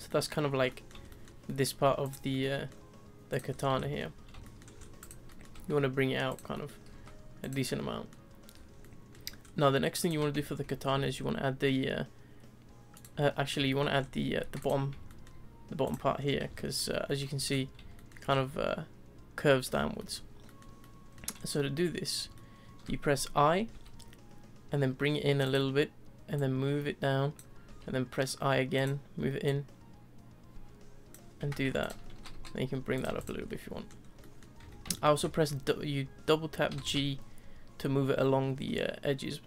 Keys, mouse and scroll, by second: 0.3-0.7 scroll down 3, 0.7-2.0 middle drag, 2.0 click, 2.3-3.3 middle drag, 3.3 click, 3.5 scroll down 1, 3.8 shift+middle click, 4.7 scroll up 1, 5.0 click, 5.3 middle click, 5.5 s, 6.5 middle click, 6.9 s, 7.6-8.5 middle drag, 8.3 scroll, 8.5 scroll down 3, 8.8-9.4 shift+middle drag, 9.4-10.0 scroll up 3, 10.0 click, 10.3 Tab, 10.9 ctrl+r, 13.2 middle click, 14.0-14.4 scroll up 3, 14.4 3, 14.6 click, 15.1 shift+middle click, 15.8 click, 16.1-16.5 scroll down 2, 16.5-17.4 shift+middle drag, 17.4-19.4 scroll up 10, 17.9-18.2 shift+middle drag, 19.4-20.0 scroll down 4, 20.0-21.3 shift+middle drag, 21.3 scroll up 2, 21.5-23.7 middle drag, 26.3 click, 29.4 click, 31.8 alt+click, 32.2 g, 33.1 Tab, 33.2 click, 33.4 scroll down 1, 33.6-34.6 middle drag, 34.6 Tab, 34.9 shift+middle drag, 35.2-36.7 scroll up 3, 36.7 g.